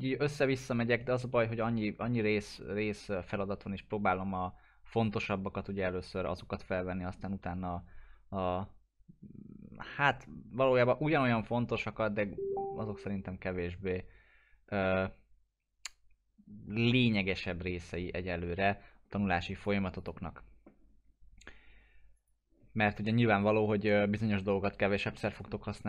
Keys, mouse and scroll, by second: 19.6 click, 23.1 middle click, 23.4-23.9 scroll down 1, 23.9-24.2 scroll up 1, 24.3-25.3 alt+middle drag.